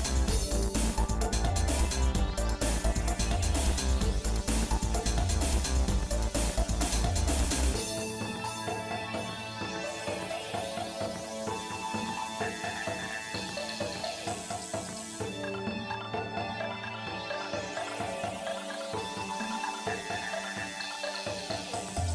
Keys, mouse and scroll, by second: 2.3-6.5 shift+middle drag, 7.0 scroll down 1, 7.4-11.8 shift+middle drag, 12.2-13.0 scroll up 2, 13.0 scroll up 1, 13.0 shift+middle click, 13.6 middle click, 14.6 ctrl+Tab, 20.0 alt+shift+click, 20.4 alt+shift+click, 21.0 click.